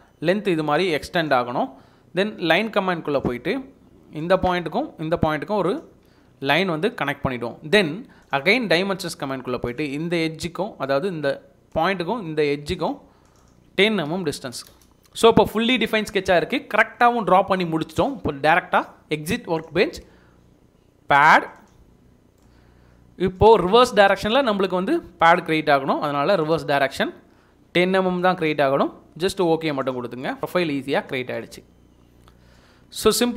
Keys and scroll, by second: 6.0 Escape, 7.8 Escape, 14.0-15.0 typing.